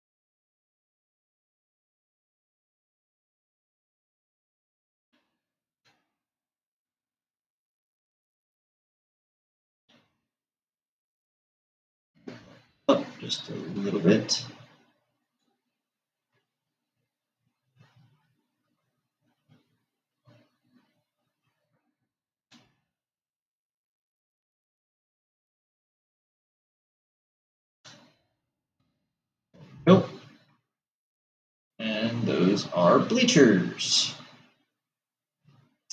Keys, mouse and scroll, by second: 5.1 r, 10.6 g, 17.1-20.4 middle drag, 22.2 g, 30.9-34.6 middle drag, 35.5-35.9 scroll down 3.